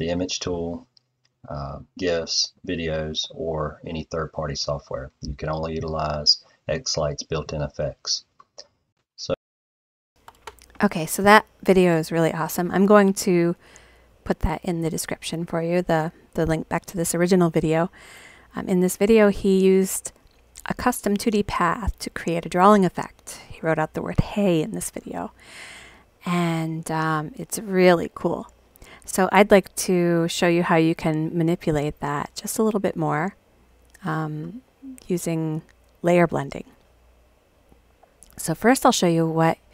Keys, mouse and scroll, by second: 9.1 click, 38.3 click.